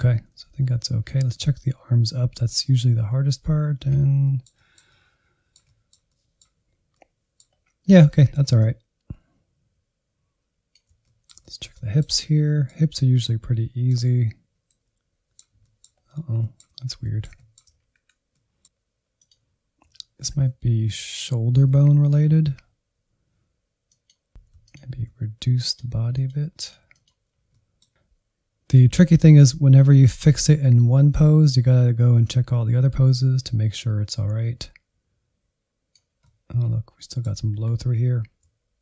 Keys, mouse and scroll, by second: 0.6 Left, 1.1-4.2 drag, 4.2-6.5 middle drag, 6.5 scroll down 1, 6.7 middle click, 7.2 scroll up 2, 8.0-9.9 drag, 9.9-12.9 shift+middle drag, 12.9-14.5 drag, 14.5-15.6 middle drag, 15.6 scroll up 1, 15.8 middle click, 16.6 Insert, 16.8 middle click, 17.1-18.1 scroll up 1, 18.1 ctrl+click, 18.6 scroll up 2, 18.8 shift+middle click, 19.3 ctrl+click, 20.1 middle click, 20.3 alt+z, 20.8 ctrl+click, 21.0 alt+z, 21.2 middle click, 21.4-22.2 scroll up 1, 22.2-24.3 drag, 24.3 alt+z, 24.9-26.2 ctrl+drag, 26.2 scroll down 1, 26.3 middle click, 26.6 Insert, 26.8 Insert, 27.0 middle click, 27.6 Insert, 28.8-35.8 drag, 35.8 middle click, 36.4 Insert, 36.9 scroll up 2, 37.0 alt+z, 37.2-38.8 drag.